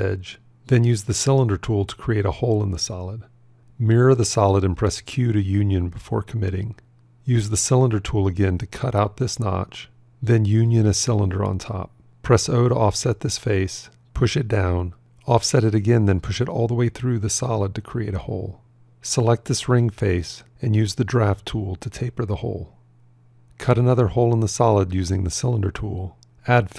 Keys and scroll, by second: 4.7 alt+x, 5.2 q, 12.7 o, 15.6 o.